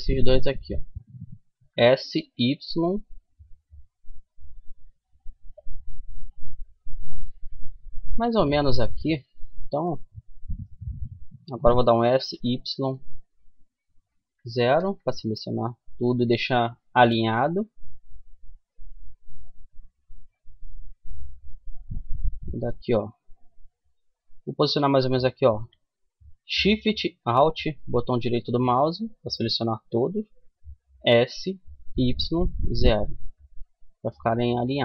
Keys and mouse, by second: 0.9 s, 1.4 middle click, 5.7 KP_3, 9.8-11.6 right drag, 11.2 s, 16.8 a, 18.0 middle click, 19.7-21.4 right drag, 20.5 KP_3, 22.7-24.7 middle drag, 27.1-30.4 right drag, 30.4 s, 33.8-34.8 middle drag.